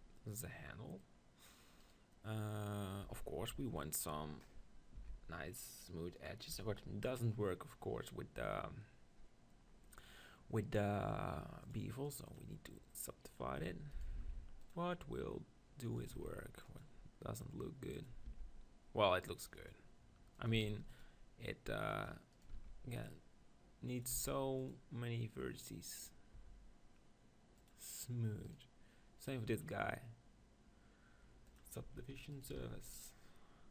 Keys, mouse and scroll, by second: 1.3 middle click, 2.0 right click, 2.8 click, 3.1 Tab, 3.6-5.6 middle drag, 5.3 ctrl+b, 6.4-14.7 drag, 13.6 Tab, 14.0 right click, 14.2 ctrl+r, 14.7 right click, 15.6 click, 16.1-17.9 drag, 16.2 ctrl+r, 18.0-19.5 drag, 18.3 ctrl+r, 20.5-25.9 drag, 20.8 ctrl+r, 22.3-24.6 right drag, 22.5 ctrl+r, 24.2 ctrl+r, 26.1-31.4 drag, 26.3 Tab, 28.5-30.5 right drag, 31.8 Tab, 32.3-33.7 drag, 32.6 ctrl+r.